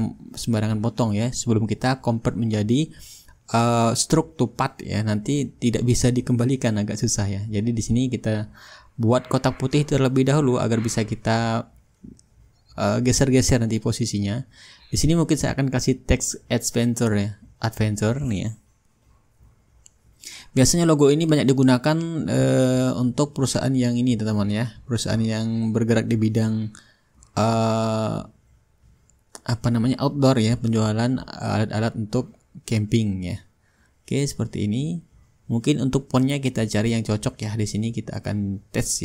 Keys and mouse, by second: 0.6-4.2 middle drag, 4.4-5.1 drag, 9.4-10.8 drag, 11.0-12.7 drag, 13.1 Caps_Lock, 24.5-27.4 typing, 28.5 ctrl+a, 31.2-34.2 drag, 34.3-38.3 drag, 36.8 t, 37.5 ctrl+a, 38.4-39.0 drag.